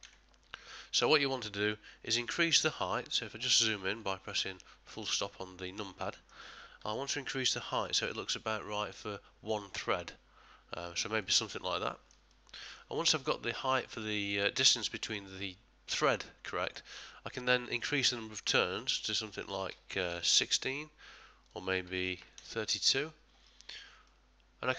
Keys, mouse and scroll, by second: 4.4 KP_Decimal, 5.8 middle click, 7.8 click, 11.8 ctrl+middle click, 12.3 middle click, 13.1 ctrl+middle click, 13.5 ctrl+middle click, 14.0 shift+middle click, 14.5 shift+middle click, 18.4 click, 24.1 click, 24.1 middle click.